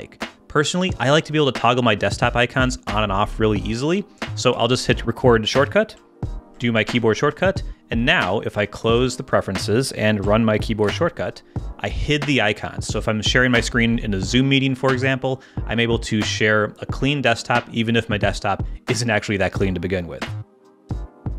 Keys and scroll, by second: 6.3 ctrl+alt+super+., 10.8 ctrl+alt+super+..